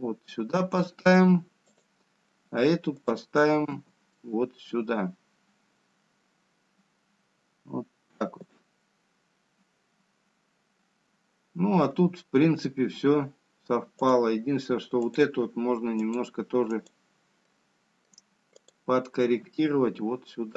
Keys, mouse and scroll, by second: 0.8 g, 5.5 click, 5.8 g, 17.0 click, 17.8 click, 18.5 click, 19.2 click, 19.6 middle click.